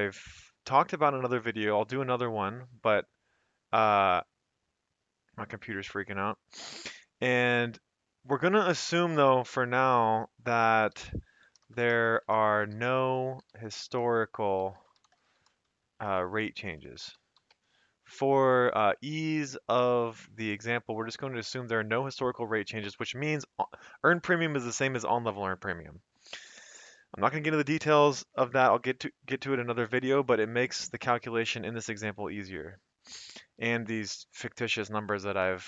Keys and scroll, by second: 10.7-17.9 typing.